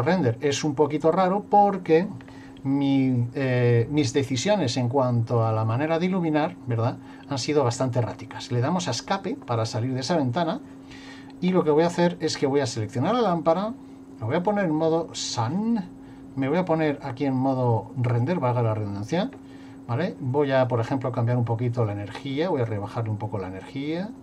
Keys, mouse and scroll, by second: 7.7 Escape, 13.1 click, 14.5 click, 16.4 click, 21.2 click, 23.7 click.